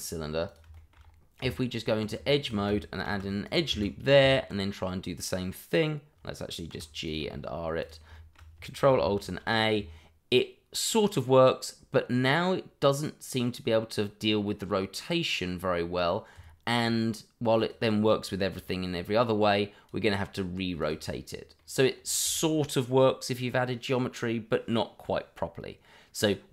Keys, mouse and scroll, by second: 0.8 middle click, 1.0-1.4 shift+scroll up 2, 2.0 Tab, 2.2 shift+middle click, 3.0 ctrl+r, 3.4 click, 3.7 Escape, 4.2 Tab, 7.0 click, 7.2 r, 7.8 click, 8.1 shift+middle click, 8.2 middle click, 9.2 ctrl+alt+a, 13.6-15.7 scroll down 1, 16.7 click, 21.0-21.5 scroll down 1, 21.5 middle click.